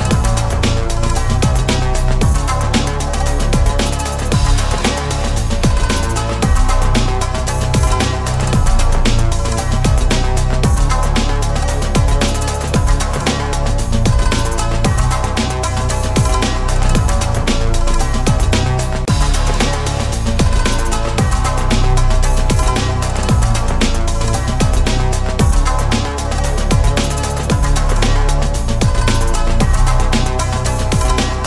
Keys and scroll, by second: 9.1 ctrl+BackSpace, 29.0 alt+a.